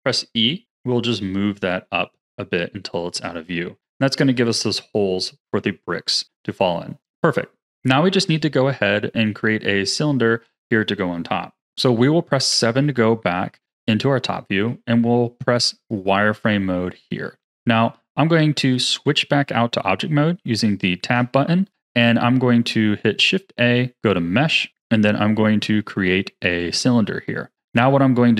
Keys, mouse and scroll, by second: 3.3-7.8 middle drag, 7.8 scroll down 1, 9.3-10.2 scroll down 1, 10.2-12.5 middle drag, 12.5 KP_7, 13.8-14.6 scroll down 1, 14.6 z, 15.6 z, 17.2-18.7 shift+middle drag, 18.7 Tab, 21.7 click, 23.2 shift+a, 27.5-28.3 scroll up 1.